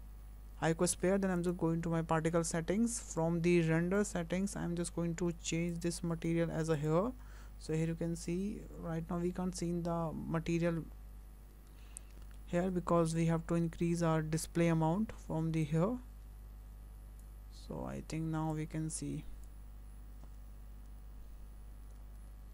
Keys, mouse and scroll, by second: 1.5 click, 2.7-4.5 scroll down 10, 5.7 click, 7.9-8.5 scroll up 3, 12.0 scroll down 3, 12.4 shift+middle click, 13.1-15.0 scroll down 6, 15.0 scroll down 1, 15.7 click, 22.0-22.5 scroll up 4.